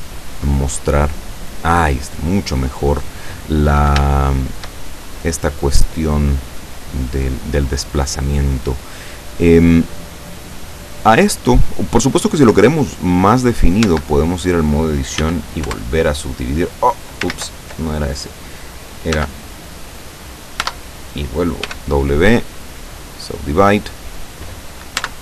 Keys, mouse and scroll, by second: 0.3-3.1 middle drag, 3.1-3.5 scroll up 2, 4.1 shift+middle click, 4.9-6.3 shift+middle drag, 6.3 scroll up 1, 6.4 scroll down 2, 9.2 scroll down 2, 11.1-12.2 drag, 12.3-13.6 drag, 13.6 middle click, 13.9 Tab, 15.2 w, 15.7 Return, 17.4 ctrl+z, 19.2 Tab, 20.7 Tab, 21.7 w, 23.0 click, 25.0 Tab.